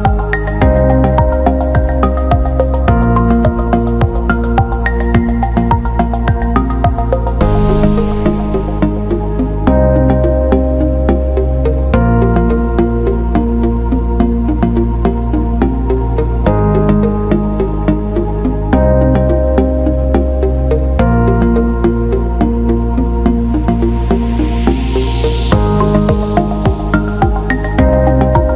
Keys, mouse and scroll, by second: 0.7-1.7 alt+middle drag, 1.9-2.3 ctrl+alt+middle drag, 2.5 alt+shift+middle click, 3.2 alt+shift+middle drag, 3.5 alt+middle click, 4.4 alt+shift+middle click, 4.8 ctrl+alt+middle click, 7.3-9.1 drag, 9.7 alt+middle click, 10.8-11.9 drag, 14.3-16.8 shift+drag, 17.2 click, 19.4 alt+shift+middle click, 19.9 click, 20.2 Tab, 22.5 click, 23.6 ctrl+z, 24.9 click, 25.6-27.2 drag, 28.2 click.